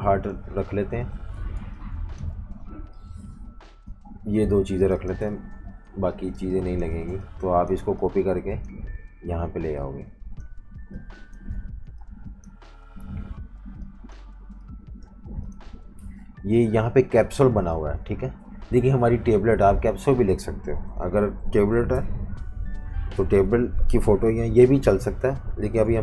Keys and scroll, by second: 0.8 Delete, 1.6-2.8 typing, 3.9 Delete, 4.1 Delete, 4.3 Delete, 5.3 super+-, 5.4 super+-, 6.3 space, 6.8 space, 11.5 typing, 12.8 v, 20.7 Right, 20.9 Right, 21.1 Right, 21.9 BackSpace, 22.1 BackSpace, 22.2 BackSpace, 23.3 BackSpace, 25.4-26.0 typing.